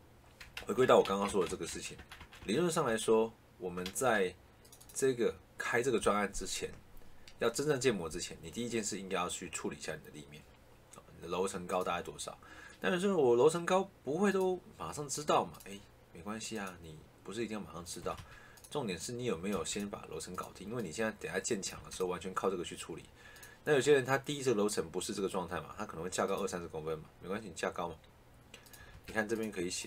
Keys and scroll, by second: 0.5 ctrl+z, 17.9 Escape, 19.4 Escape, 21.7 Escape, 28.7 Escape.